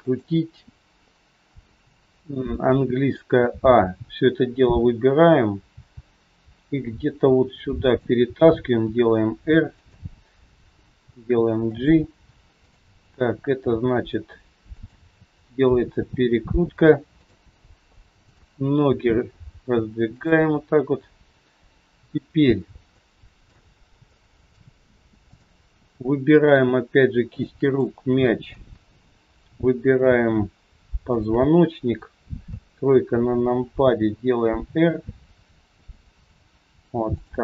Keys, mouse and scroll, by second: 3.4 a, 12.5 click, 13.6 r, 15.7 g, 18.2 click, 18.8 g, 22.3 scroll up 1, 23.0 shift+middle click, 23.0 scroll up 1, 24.1 middle click, 25.7 click, 26.3 shift+click, 27.7 middle click, 31.1 shift+click, 32.5 KP_3, 33.7 r.